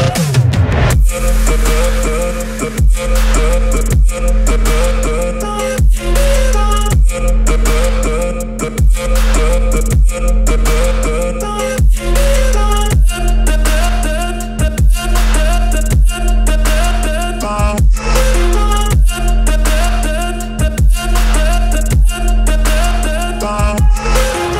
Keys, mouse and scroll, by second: 2.5 x, 6.7 r, 8.2 x, 19.5 click, 20.2-20.6 scroll, 21.2 scroll, 22.1-22.6 scroll, 24.2 r.